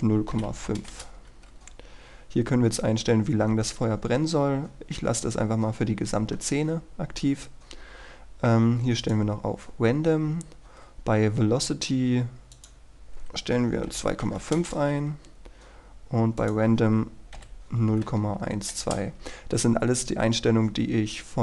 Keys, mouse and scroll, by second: 0.6 KP_5, 1.1 Return, 7.1-9.0 scroll down 1, 9.2 click, 10.2-12.7 scroll down 1, 12.7 click, 14.2 KP_2, 14.7 Return, 16.5 click, 17.9 KP_1, 18.9 Return.